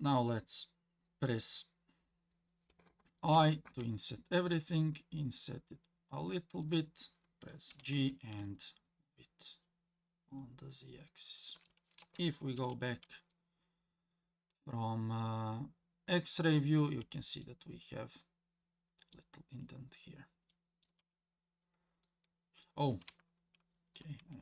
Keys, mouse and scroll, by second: 7.7 g, 12.6 alt+z, 13.3-14.5 middle drag, 15.7-16.4 scroll up 2, 16.6 scroll down 1, 17.0 Tab, 17.4-19.1 middle drag, 19.5 scroll up 1, 20.0 scroll down 1, 20.5 middle click, 21.0 Tab, 21.5-22.0 scroll up 1, 22.0 middle click, 24.2 ctrl+z.